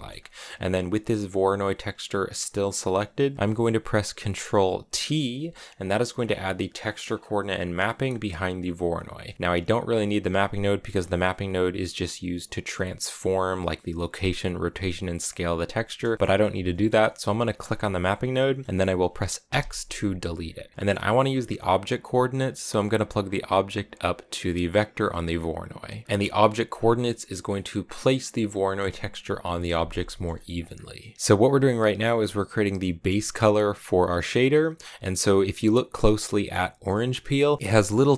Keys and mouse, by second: 0.7 click, 4.9 ctrl+t, 5.4 middle click, 6.8 middle click, 8.4 click, 17.5 click, 19.4 x, 20.6 click, 23.1-25.1 drag, 25.6 click, 27.3 click, 30.1 middle click, 30.4 click, 31.0 middle click.